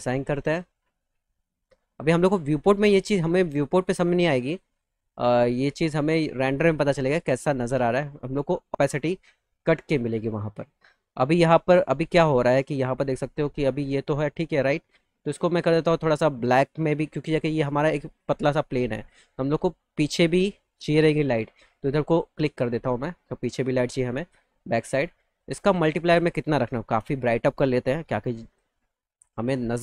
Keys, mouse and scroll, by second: 0.3 click, 1.8 click, 4.3 click, 5.3 click, 6.5 click, 8.5-10.0 alt+middle drag, 11.8-13.7 alt+middle drag, 14.2-15.2 alt+middle drag, 17.6 click, 18.1 click, 18.5 click, 20.1 alt+middle click, 21.9 click, 22.9 alt+middle click, 25.3 click.